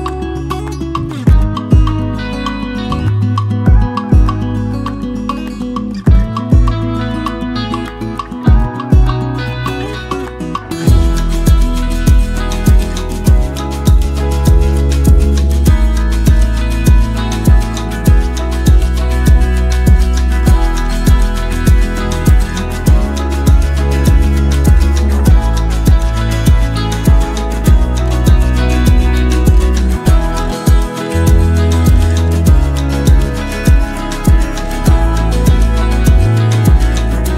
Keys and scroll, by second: 6.4 ctrl+a, 8.3 ctrl+d, 9.0 ctrl+t, 9.9 ctrl+z, 25.3-26.6 typing.